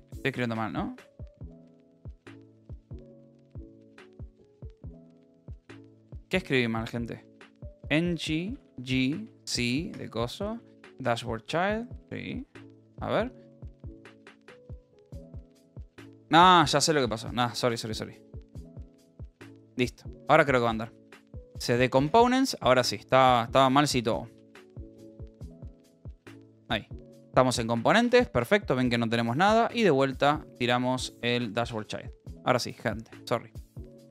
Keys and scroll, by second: 0.6 Right, 1.0 Left, 1.8 BackSpace, 2.4 Return, 4.0 Down, 4.4 Up, 5.2 Return, 5.6 Up, 6.0 Left, 7.8 Right, 9.2 a, 10.0 BackSpace, 10.4 Right, 11.6 Return, 12.8 Up, 15.2 BackSpace, 17.0 c, 17.2 ., 17.5 Return, 18.6 c, 18.7 space, 18.8 d, 19.2 Tab, 19.4 Return, 21.2 c, 21.3 space, 21.4 c, 21.6 Tab, 22.0 \, 22.6 Return, 24.3 q, 24.8 BackSpace, 25.8 BackSpace, 26.4 Return, 27.7-28.5 typing, 28.6 Return, 29.3 Up, 31.7 Return.